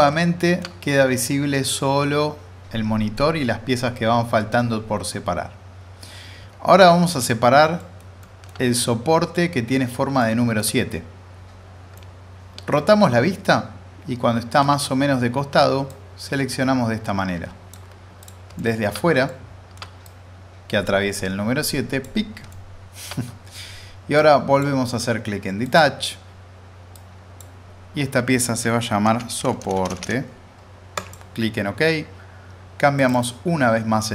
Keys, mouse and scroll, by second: 0.0-3.1 middle drag, 3.1-7.5 alt+middle drag, 7.5-7.8 scroll up 2, 7.8 middle click, 8.0 scroll down 2, 8.2 middle click, 10.2-10.8 alt+middle drag, 15.9-17.7 drag, 18.6-19.2 alt+middle drag, 20.0-22.2 drag, 22.5-23.1 alt+middle drag, 24.2-24.8 drag, 28.8-29.8 typing, 30.9 click.